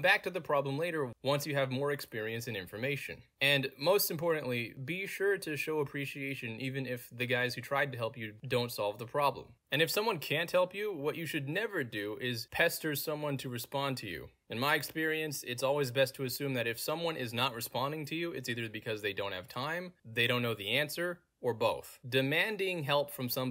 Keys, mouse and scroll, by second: 0.4 click, 1.0 middle click, 1.0-1.7 scroll down 2, 3.2-4.4 middle drag, 3.2-4.4 scroll down 2, 5.6 click, 6.5 middle click, 6.5-6.9 scroll down 2, 7.3-8.5 middle drag, 7.3-8.2 scroll down 2, 8.2-8.9 scroll down 1, 9.7 click, 10.9 click, 11.8-12.5 scroll down 2, 12.5-13.5 scroll down 1, 13.5-14.1 scroll down 2, 13.9 middle drag, 14.5 middle click, 14.5 scroll down 2, 15.5 middle click, 15.5-16.1 scroll down 2, 16.4 middle click, 16.4-17.2 scroll down 2, 17.2 scroll down 1, 17.5 click, 18.0 middle click, 18.0-18.5 scroll down 2, 18.5-18.9 scroll down 1, 19.1 click, 19.5-20.5 scroll down 2, 20.5-21.1 scroll down 1, 21.8-22.5 scroll down 2, 22.5-23.3 scroll down 1, 23.3-23.5 scroll down 1.